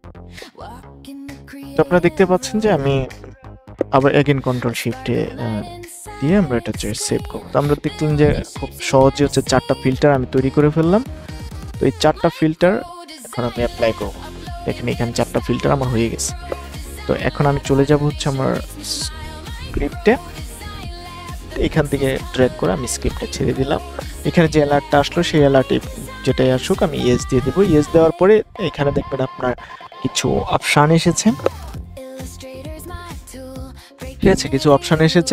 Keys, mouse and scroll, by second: 3.3 ctrl+shift+s, 5.2 click, 6.4 BackSpace, 6.5 KP_4, 7.8 click, 19.4-35.3 drag.